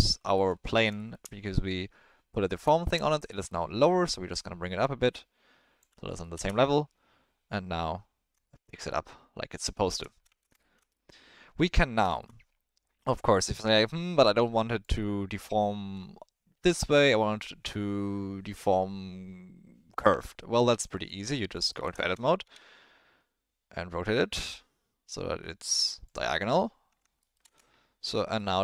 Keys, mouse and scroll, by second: 0.3 middle click, 0.7 click, 0.9 shift+middle drag, 2.8 shift+middle click, 3.3 middle click, 4.3-5.8 drag, 6.2 middle click, 6.3 space, 8.5 shift+middle drag, 8.9 middle click, 9.8 shift+middle drag, 10.2 space, 10.7 shift+middle drag, 12.1 shift+middle click, 13.0-14.8 drag, 20.1 Tab, 21.3 alt+middle click, 21.7 ctrl+middle click, 21.9 shift+middle click, 22.4 r, 26.4 middle click, 26.9 Tab, 27.2 middle click, 27.4 space, 28.3-28.6 middle drag.